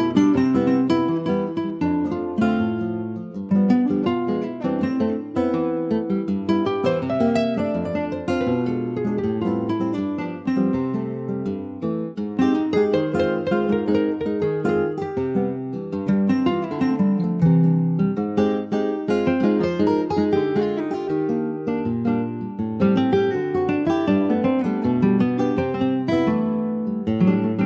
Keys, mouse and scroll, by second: 7.3 Tab, 7.5 click, 7.8-8.2 scroll down 2, 8.2 middle click, 8.4 ctrl+scroll up 1, 8.6 ctrl+s, 8.7 click, 9.0 shift+middle click, 9.9 scroll up 2, 10.4-11.6 middle drag, 11.6 ctrl+s, 11.9-13.6 middle drag, 13.6 ctrl+s, 14.2 scroll down 2, 14.5-15.7 middle drag, 15.7 ctrl+s, 15.9 click, 16.3 ctrl+a, 17.7 ctrl+s, 17.8 click, 18.3-21.3 middle drag, 21.8 ctrl+s, 22.0 click, 22.3 middle click, 22.9 ctrl+s, 23.1 ctrl+click, 23.3 middle click, 24.1 ctrl+s, 24.2 ctrl+click, 24.5 click, 24.9-26.3 middle drag, 26.3 click.